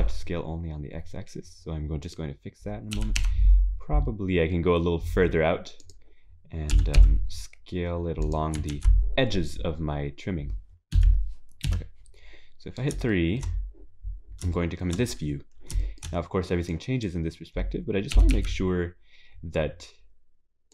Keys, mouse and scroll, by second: 9.8 ctrl+s, 9.8-10.9 scroll down 5, 10.9 KP_7, 11.7 KP_3, 12.5-12.9 scroll down 3, 13.1 shift+middle click, 13.9 scroll up 3, 14.5 shift+middle click, 15.3-15.8 scroll up 2, 16.7-17.1 scroll up 2, 18.1 click.